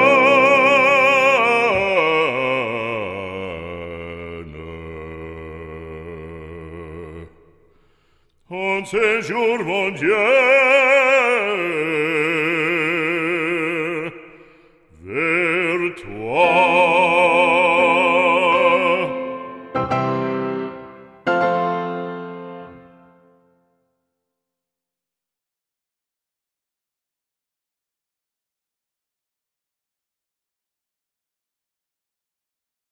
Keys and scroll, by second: 26.8 ctrl+d.